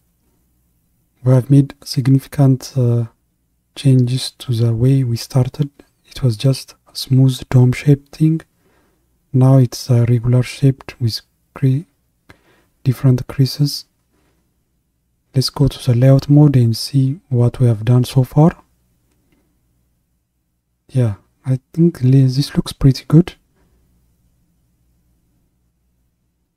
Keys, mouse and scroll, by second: 0.0 scroll up 1, 0.2-1.0 scroll down 3, 1.0 scroll down 1, 1.0-13.9 middle drag, 13.9 click, 15.4 click, 19.3-19.9 scroll down 1, 19.9-23.0 middle drag, 24.3-24.7 scroll down 1, 24.7-26.5 middle drag.